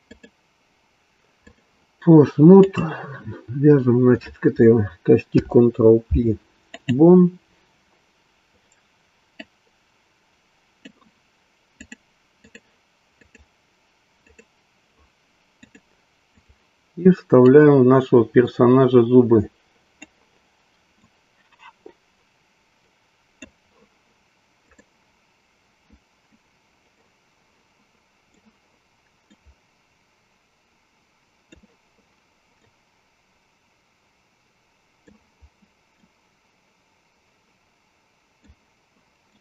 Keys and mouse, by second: 0.1 click, 2.6 click, 5.2 ctrl+p, 9.2-11.0 drag, 11.8-12.6 drag, 13.4 click, 14.5 click, 15.5-16.5 drag, 17.4-23.6 drag, 24.8-25.9 drag, 26.8-28.4 drag, 29.2-31.6 drag, 32.6-35.2 drag, 36.1-38.6 drag, 39.2-39.4 drag.